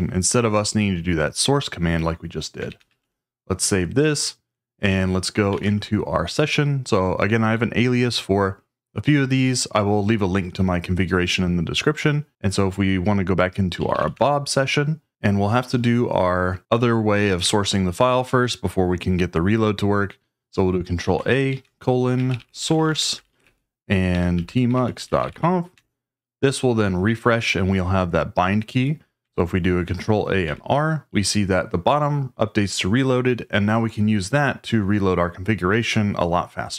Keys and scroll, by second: 2.4-3.4 typing, 5.2-6.0 typing, 13.5-14.4 typing, 21.0 ctrl+a, 21.5-25.8 typing, 29.8 ctrl+a, 30.4 r.